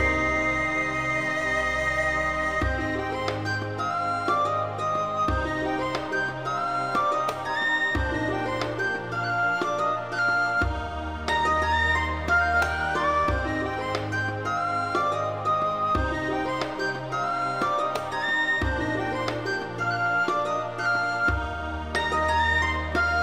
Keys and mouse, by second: 0.3 s, 0.4 z, 0.5 KP_0, 0.7 KP_Enter, 1.0 shift+middle click, 1.4 middle click, 1.8 click, 2.0 alt+click, 2.1 alt+click, 2.4 g, 3.2 click, 3.5 Tab, 3.5 middle click, 3.9 alt+z, 3.9 middle click, 4.1 middle click, 4.3 alt+middle click, 4.9 alt+middle click, 5.2 Tab, 5.5 alt+z, 6.4 click, 6.9 g, 7.0 z, 7.4 click, 7.5 Tab, 7.9 shift+middle click, 8.0 alt+z, 8.3 shift+middle click, 8.5 alt+middle click, 8.7 shift+middle click, 8.9 shift+middle click, 9.3 shift+middle click, 9.6 shift+middle click, 10.1 shift+middle click, 11.7 click, 12.0-14.1 drag, 14.1 x, 14.5 x, 14.6 click, 14.8 x, 15.1 click, 15.4 x, 16.0 click, 16.2 click, 16.4 click, 17.1 middle click, 17.3 Tab, 17.5 alt+middle click, 17.7 shift+middle click, 18.2 alt+z, 18.2 shift+middle click, 18.6 shift+middle click, 18.9 middle click, 19.6 middle click, 19.8 alt+middle click, 20.0 alt+z, 20.2 alt+z, 20.5 g, 21.0 click, 21.2 shift+middle click, 21.5 shift+middle click, 21.9 click, 22.6 g.